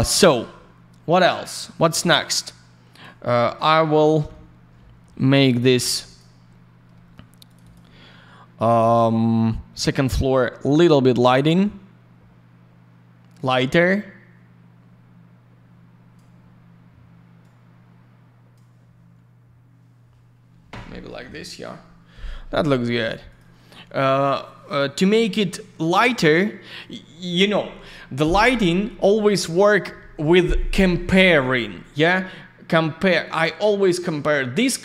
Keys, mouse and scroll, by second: 3.2 middle click, 3.4 middle click, 4.2 ь, 6.0 click, 6.1 click, 6.9 alt+middle click, 7.4 click, 7.5 click, 7.6 click, 7.7 double click, 9.8 click, 9.9 click, 11.6 click, 17.4 click, 23.3 click, 23.3 click.